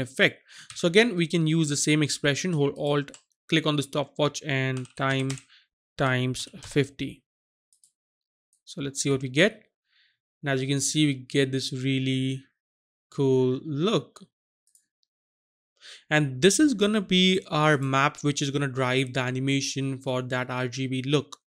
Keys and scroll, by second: 0.6 ctrl+z, 4.8-6.6 typing.